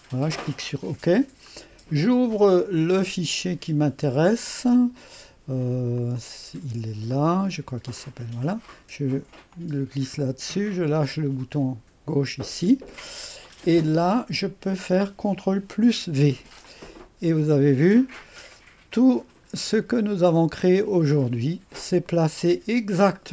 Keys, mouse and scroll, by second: 0.0 click, 2.3 click, 3.0 click, 6.0 click, 6.2 click, 8.0-12.1 drag, 15.8 ctrl+v, 16.7-19.0 drag, 19.4-20.3 scroll up 1, 20.3 scroll up 1, 20.6 click, 21.5-22.1 scroll up 1, 22.1 middle click.